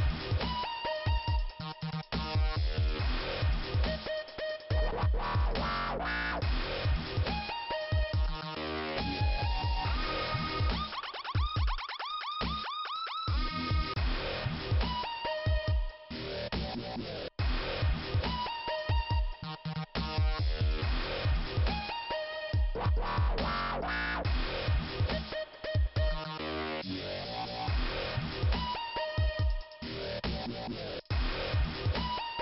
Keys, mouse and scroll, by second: 2.0 click, 2.9 click, 3.8 i, 4.9 scroll up 1, 6.5 right click, 7.5 right click, 8.1 click, 9.0 click, 10.4 click, 11.1 click, 12.3 click, 13.5 click, 14.5 click, 15.7 click, 16.6 right click, 18.0 click, 18.9 click, 19.9 scroll down 2, 21.2 click, 24.2 p, 26.1-26.8 scroll up 1, 27.0 right click, 27.8 click, 29.2 click, 30.1 click, 30.5 click.